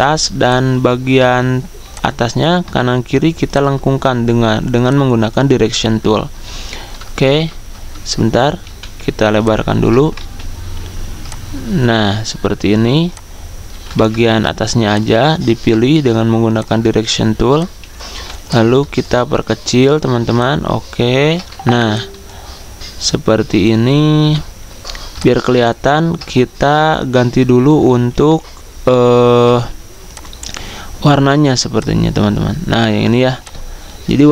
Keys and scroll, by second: 7.1-8.4 typing, 10.1 ctrl+z, 14.4 a, 18.1 v, 27.9 ctrl+z, 29.4 a.